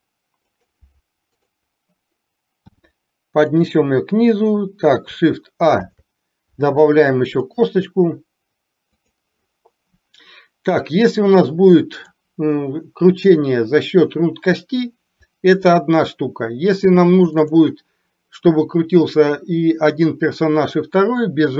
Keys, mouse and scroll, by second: 1.5 click, 2.8 g, 5.9 shift+a, 7.5 click, 9.0 click, 10.8-12.3 drag, 17.4 click.